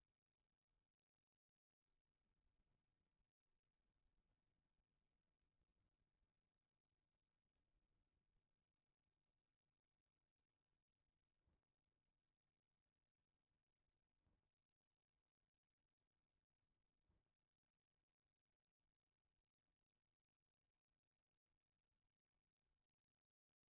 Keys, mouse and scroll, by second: 4.5 middle click, 5.3-12.2 middle drag, 13.4 click, 14.1-17.2 middle drag, 20.2 shift+middle click, 20.9 middle click, 22.5 shift+click.